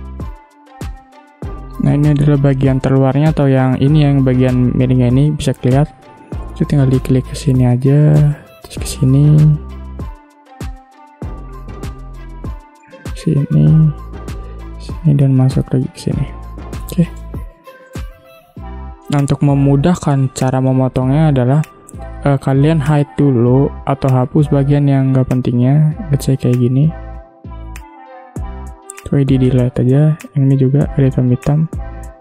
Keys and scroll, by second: 16.8 v, 17.4 space, 25.0 ctrl+g, 27.9 Delete.